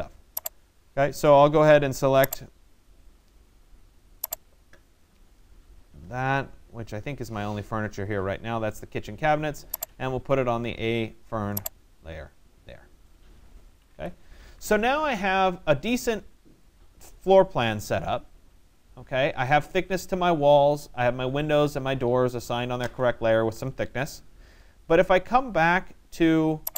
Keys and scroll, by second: 13.3 Escape.